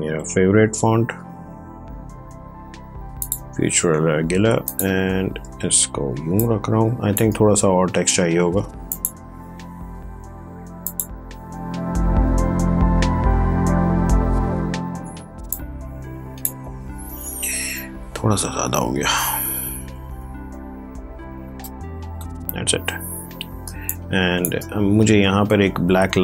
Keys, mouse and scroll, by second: 3.1 click, 6.0 ctrl+space, 6.3 ctrl+click, 6.5 ctrl+space, 8.5 t, 8.8 click, 12.4 ctrl+v, 15.4-17.3 drag, 17.3 BackSpace, 23.5 space, 23.8 click, 24.1 space.